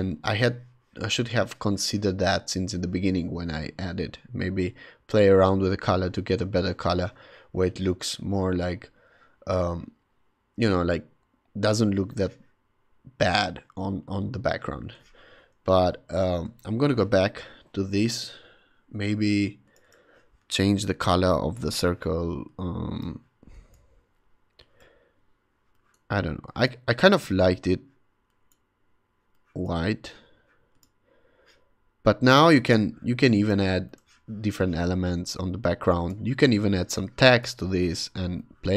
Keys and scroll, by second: 15.9 alt+super+z, 36.6 v, 37.6 super+t.